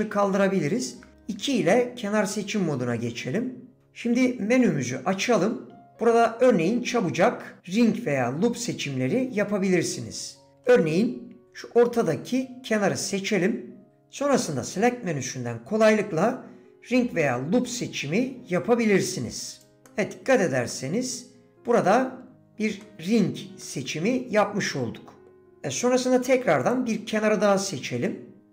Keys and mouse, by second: 3.7 2, 5.7 d, 19.9-21.5 middle drag, 21.8 click, 22.8 click, 23.6-25.2 drag, 25.4 click.